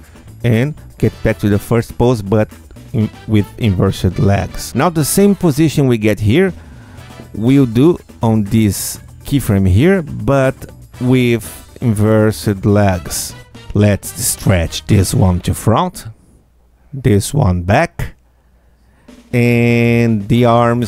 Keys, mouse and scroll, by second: 5.6 click, 7.7 click, 8.8 ctrl+F2, 10.1 Tab, 12.6 click, 13.3 q, 13.9-16.0 alt+drag, 16.9-18.5 alt+drag, 18.9 alt+click, 20.0 alt+click, 20.7-20.8 alt+drag.